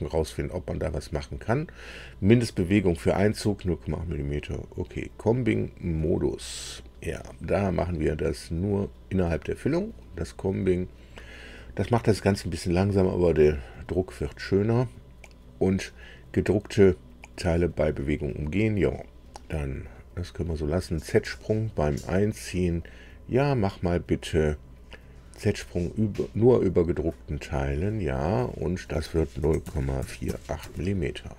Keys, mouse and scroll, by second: 7.0 click, 9.1 click, 22.8 click, 27.0 click, 28.3 click, 29.4 KP_0, 29.6 KP_Decimal, 30.0 KP_4, 30.3 KP_8, 30.6 Tab.